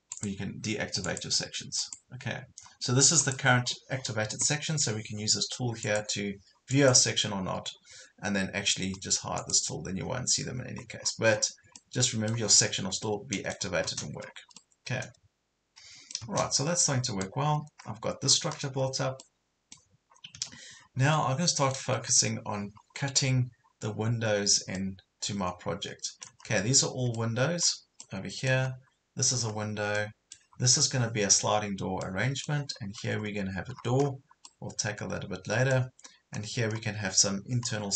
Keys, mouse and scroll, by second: 0.1 click, 3.7 scroll down 1, 4.0 scroll up 1, 5.8 click, 10.4 scroll down 1, 11.0-11.6 scroll up 2, 11.8 middle click, 12.6 scroll up 1, 13.0 middle click, 13.8-14.6 scroll down 3, 14.6-16.6 middle drag, 16.6 Escape, 17.0 scroll down 1, 17.5 scroll up 1, 18.3 scroll down 1, 19.3 middle click, 20.1 scroll up 1, 20.4 Escape, 20.8 scroll down 1, 21.2 middle click, 22.0 scroll up 1, 23.0-23.5 scroll down 1, 23.7 scroll up 1, 24.8-26.5 middle drag, 26.5 scroll down 1, 27.2 middle click, 28.7 scroll up 1, 29.6 scroll down 1, 30.0-31.0 middle drag, 32.0 middle click, 32.8 scroll up 1, 33.7-34.3 scroll down 2, 34.5 middle click, 36.0 scroll up 1, 37.7 scroll down 1.